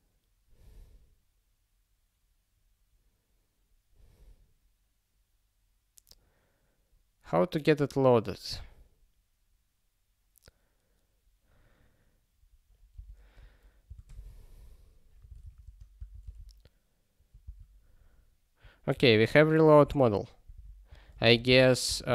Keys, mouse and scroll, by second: 12.9 q, 18.9 ctrl+n, 20.5 super+o, 21.2 ctrl+p, 22.0 alt+d.